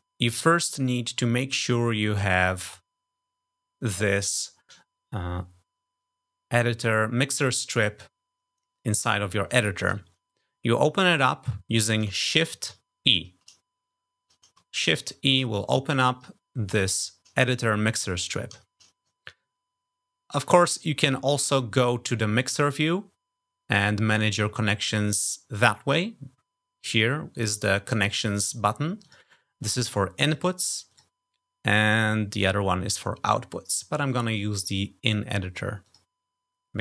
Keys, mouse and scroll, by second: 12.6 shift+e, 14.9 shift+e, 18.6 shift+e, 22.3 click, 27.3 click, 28.9 click, 30.1 click, 30.8 click, 35.8 click.